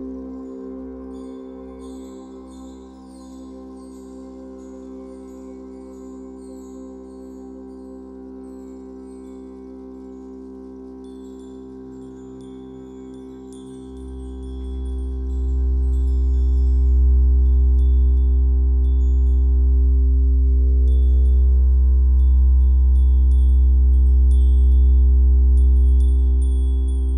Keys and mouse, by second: 0.0 click, 2.0 click, 5.4 click, 7.4-9.1 drag, 9.3-9.9 drag, 11.0-13.6 drag, 14.2 click, 18.8 click, 19.1 click, 20.4 click, 21.2 click, 23.9 -, 24.4 space.